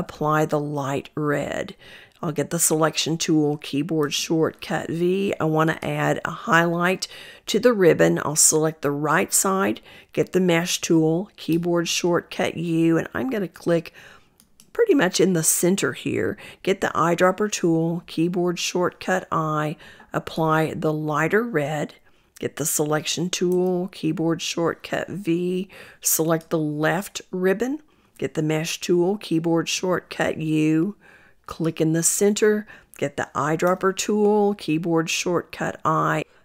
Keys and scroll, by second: 2.1 v, 10.0 u, 16.5 i, 22.3 v, 32.8 i.